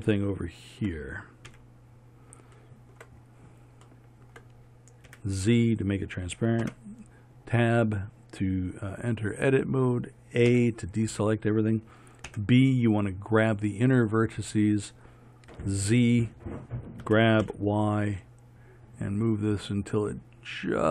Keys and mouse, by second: 1.6 KP_3, 5.2 z, 6.7 Tab, 10.6 a, 12.4 b, 15.6 z, 17.1 g.